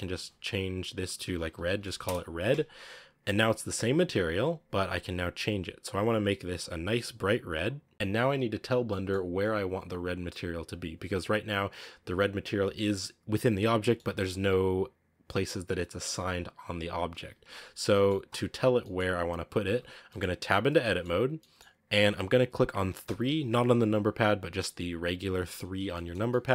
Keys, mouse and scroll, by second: 7.9-17.6 middle drag, 17.6 scroll up 2, 17.8-18.9 shift+middle drag, 18.9-19.6 scroll up 2, 19.6 Tab, 19.8 scroll down 1, 20.0-23.0 middle drag, 23.0 3, 24.4-26.5 middle drag.